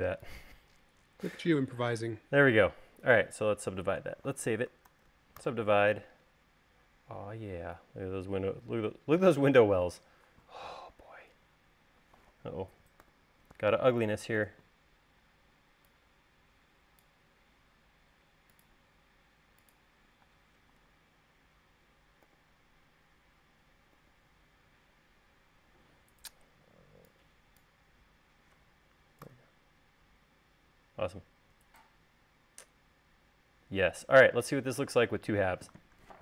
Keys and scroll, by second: 2.2 space, 5.2 super+s, 5.6 u, 13.4 u, 14.9 e, 20.6 space, 22.5 u, 24.2 u, 26.9 e, 29.4 u, 33.7 u.